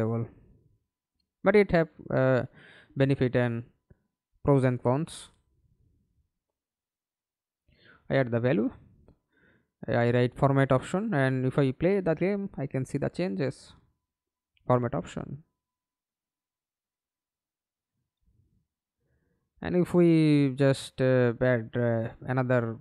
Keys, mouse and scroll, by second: 0.0-1.1 typing, 1.2 Return, 9.7 double click, 10.2 double click, 12.0 alt+p, 13.6 a, 14.9 Escape, 21.3 Right, 21.6 Right, 21.7-22.5 Right.